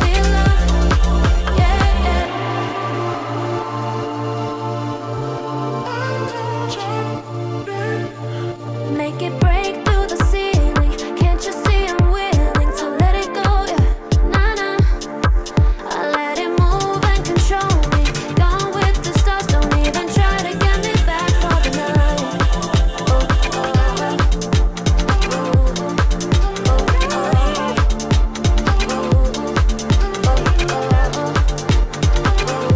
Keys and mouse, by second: 1.0 click, 2.1 click, 2.7 alt+click, 3.7 ctrl+b, 11.7 click, 12.6 click, 13.4 z, 14.6-15.7 drag, 16.2 click, 16.5 shift+click, 17.6 j, 18.2-19.7 drag, 20.0 `, 20.8 click, 21.5-23.1 drag, 24.0-26.8 drag, 27.4 alt+click, 29.6 e, 30.8 s.